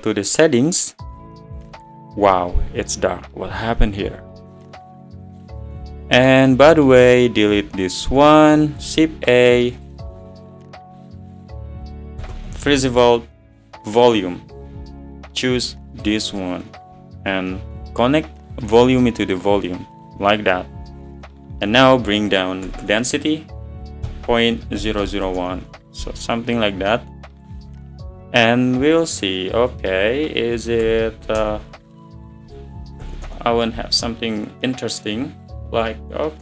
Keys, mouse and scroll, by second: 0.3-0.8 drag, 6.1 click, 6.4 scroll down 5, 17.3 scroll up 7, 25.4 0, 27.6 click, 30.7-35.6 drag.